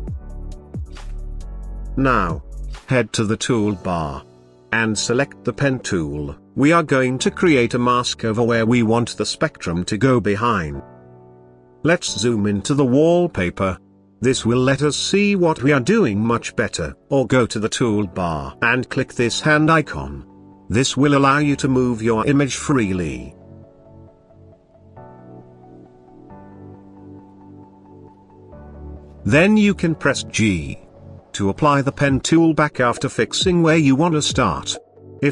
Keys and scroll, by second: 30.0 g.